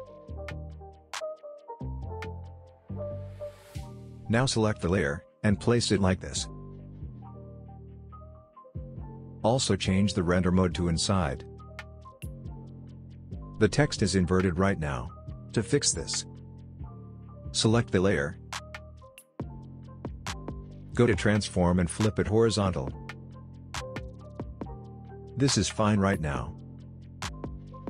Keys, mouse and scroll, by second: 0.1-1.1 typing, 1.9 Right, 4.2-10.1 drag, 6.4-9.0 shift+drag, 11.9-12.7 scroll up 2, 12.7-13.1 scroll down 2, 13.1-14.9 scroll up 2, 15.3 click, 15.6 right click, 16.4 click, 18.2 right click, 22.2 click, 25.5-26.1 scroll down 1, 26.1-27.8 scroll up 1.